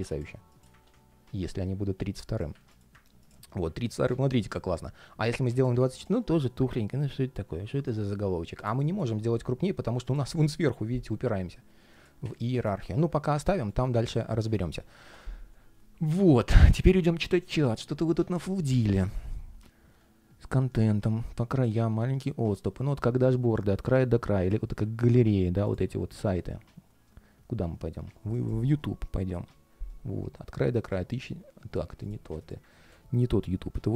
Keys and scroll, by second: 1.3 super+z, 3.7 alt+h, 13.4 alt+i, 13.8 super+s, 32.5 super+w.